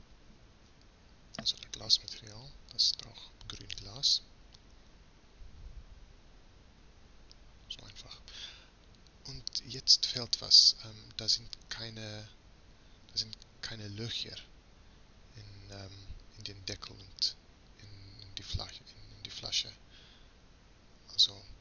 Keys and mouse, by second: 8.4-12.7 middle drag, 12.7 z, 13.2 z, 14.9-18.9 middle drag, 19.9 ctrl+s.